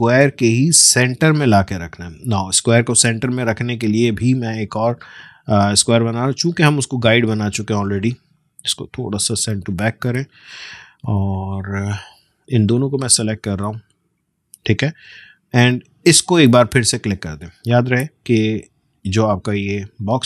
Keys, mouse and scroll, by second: 9.3 ctrl+[, 11.5 click, 13.2-20.2 shift+drag.